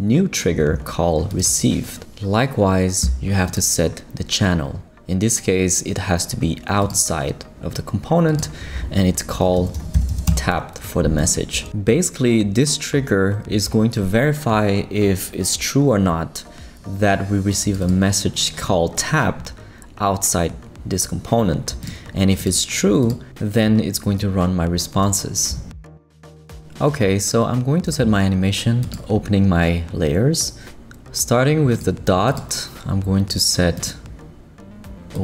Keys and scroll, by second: 9.2-10.6 typing.